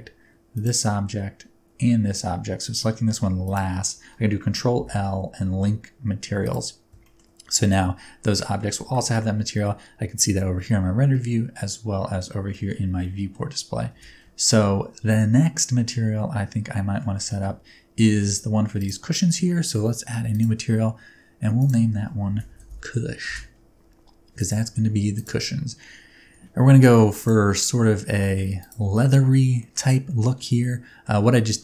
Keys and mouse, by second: 0.5 shift+click, 3.4 shift+click, 4.7 ctrl+l, 7.0 shift+click, 8.4 shift+click, 8.8 alt+a, 11.1-12.2 middle drag, 12.5 shift+middle click, 13.0 middle click, 13.9 n, 14.4 shift+middle drag, 15.9-17.0 middle drag, 17.3 shift+middle drag, 18.0 shift+middle drag, 18.8 click, 20.3 click, 21.7 middle click, 22.5-23.9 drag, 24.4 click, 25.1 click, 26.3 ctrl+t, 26.8 g, 27.6 middle click, 28.2 middle click, 30.1 middle click, 30.7 middle click.